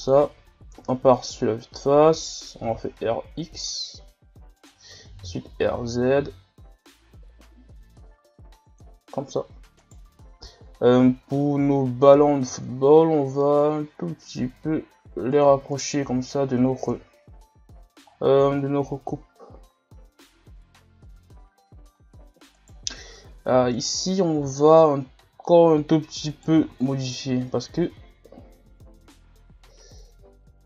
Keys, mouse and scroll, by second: 0.8 KP_1, 2.6 r, 5.2 r, 9.2-9.8 scroll up 1, 9.8 right click, 10.3-10.7 scroll up 1, 11.1 scroll down 2, 11.3-12.4 middle drag, 12.4 s, 15.7-16.1 middle drag, 16.1 a, 16.9 KP_1, 17.6 scroll down 1, 18.2-18.8 scroll down 8, 19.0-20.7 scroll up 7, 20.7 scroll down 3, 21.6-22.2 scroll up 1, 22.2 scroll up 2, 22.5 right click, 23.0 Tab, 23.2 scroll up 2, 23.8 alt+right click, 25.3 z, 26.3 right click, 26.5 b, 27.8 s.